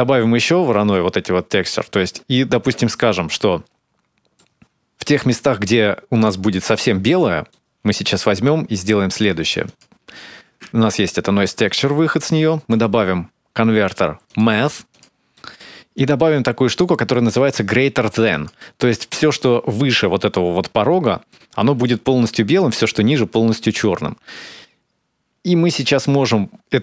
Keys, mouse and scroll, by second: 0.6 shift+d, 2.8 middle click, 6.9 middle click, 8.1-9.3 scroll up 2, 8.5 middle click, 9.5 ctrl+shift+click, 12.2 shift+a, 15.1 middle click, 15.8 click, 18.9 middle click, 19.6-20.6 scroll up 8, 20.9 middle click, 21.6 shift+click.